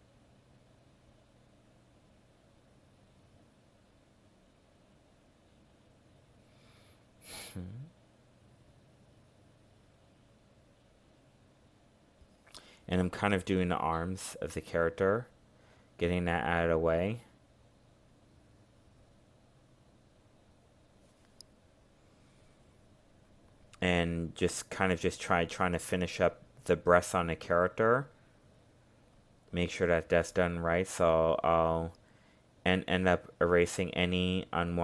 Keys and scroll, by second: 3.4 ctrl+z, 17.6 ctrl+z.